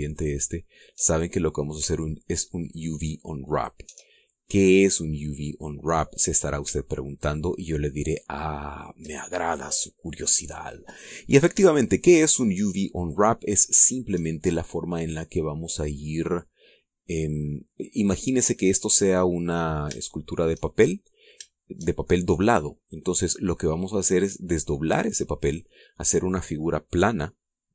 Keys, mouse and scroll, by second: 0.7 alt+shift+right click, 1.7 alt+shift+right click, 3.1 alt+shift+right click, 4.0 alt+shift+right click, 4.6 alt+shift+scroll down 1, 4.9-6.7 shift+middle drag, 6.9-7.3 scroll up 1, 7.3 shift+middle click, 8.6 shift+click, 13.5 shift+right click, 14.3 shift+right click, 14.9-15.6 shift+scroll down 1, 15.6 scroll up 1, 16.3-18.2 middle drag, 18.3-18.9 scroll down 2, 19.1 scroll up 2, 19.7 scroll down 2, 20.5 shift+middle click, 21.5 middle click, 22.0 shift+middle click, 22.5 shift+middle click.